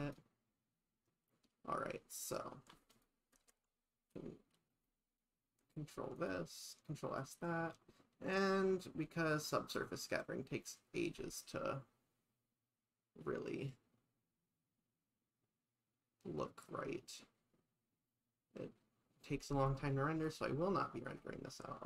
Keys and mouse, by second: 0.0 click, 1.1 KP_0, 2.9 click, 5.6 ctrl+s, 7.7 shift+middle click, 9.8 shift+middle click, 20.3 click.